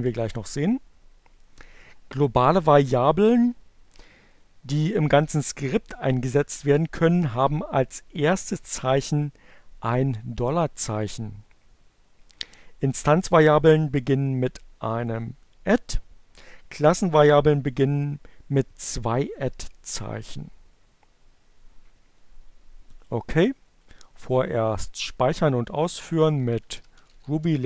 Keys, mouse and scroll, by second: 23.4 click, 24.3 click, 25.5-26.6 typing.